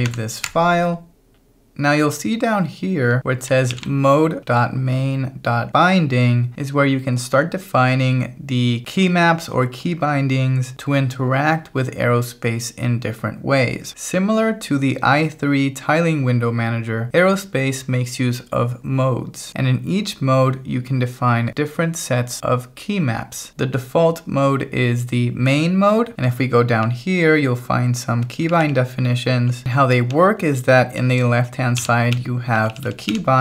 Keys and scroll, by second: 0.0-0.6 typing, 2.1 j, 2.6 j, 3.1 k, 3.7 shift+v, 26.1 j, 26.8 j, 28.7-32.7 typing.